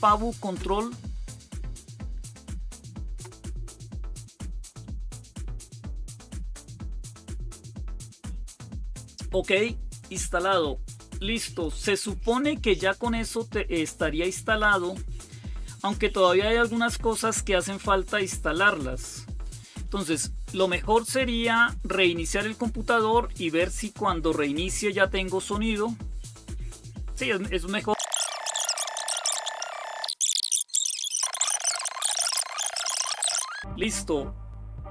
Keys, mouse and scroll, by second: 0.8 typing, 2.0-5.6 typing, 11.3 click, 13.2-14.2 scroll down 2, 14.2-14.8 scroll down 1, 14.8-16.0 scroll down 1, 16.0-16.6 scroll down 1, 18.0-18.8 scroll down 2, 19.1 click, 19.7 click, 28.4 click.